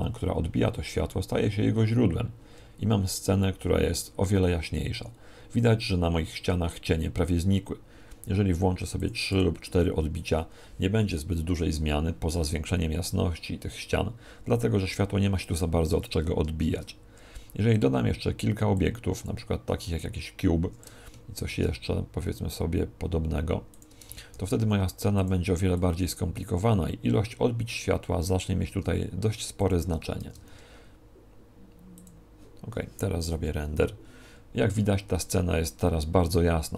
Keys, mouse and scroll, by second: 15.5 Escape, 16.6 shift+a, 18.7 click, 21.3 shift+d, 23.7 click, 24.3 shift+d, 25.8 click, 28.6 s, 29.6 click, 30.2 shift+d, 32.0 click.